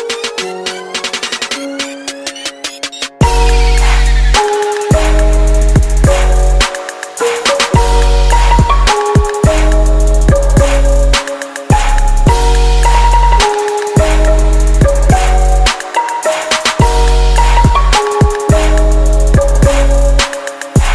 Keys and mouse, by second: 4.9-6.8 drag, 6.9-9.0 drag, 12.3-19.2 drag, 18.4-20.1 middle drag.